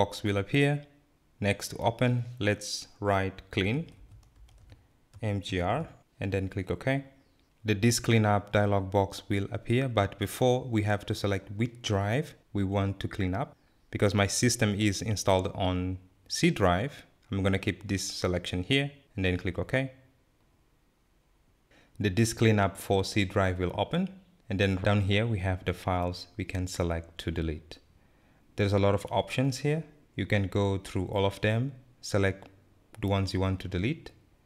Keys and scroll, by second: 3.8-4.9 typing, 6.2-7.0 typing.